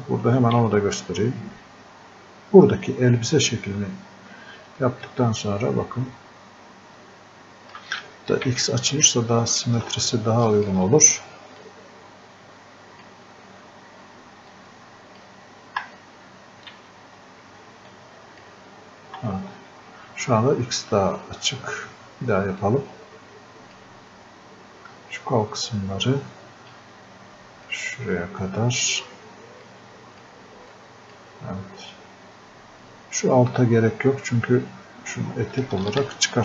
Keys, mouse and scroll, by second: 4.5 ctrl+Num_Lock, 4.5 click, 5.1 ctrl+click, 8.5 x, 9.6 ctrl+click, 16.8 x, 17.9-36.4 ctrl+drag.